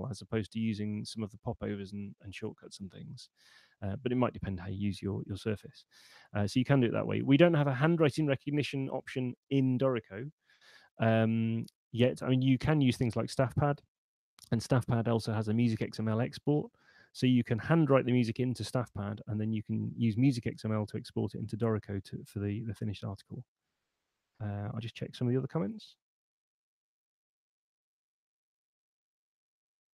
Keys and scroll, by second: 3.5 super+9.